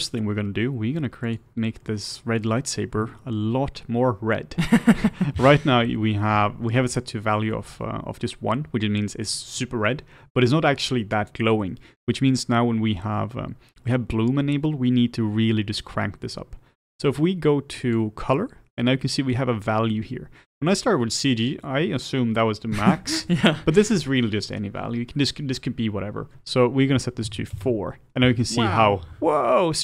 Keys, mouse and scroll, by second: 0.3-1.5 scroll up 1, 1.5 click, 1.8-2.7 middle drag, 2.7-3.1 scroll up 1, 3.1-27.6 shift+middle drag.